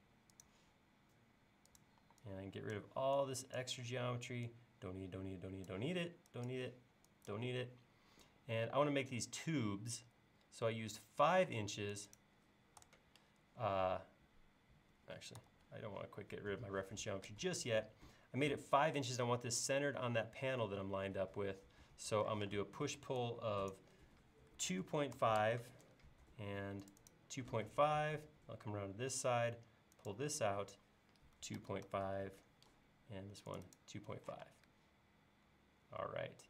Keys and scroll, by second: 2.0 e, 11.5 space, 12.8 BackSpace, 15.5 super+z, 22.4 p, 24.4-25.4 typing, 31.2-32.8 typing, 34.5 space.